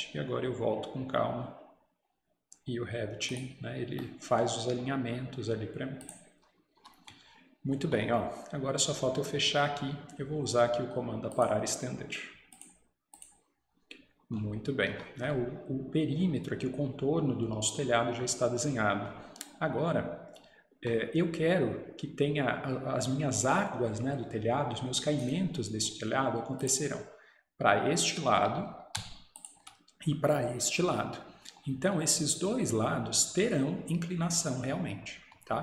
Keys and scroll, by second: 6.8 Escape, 14.9 Escape.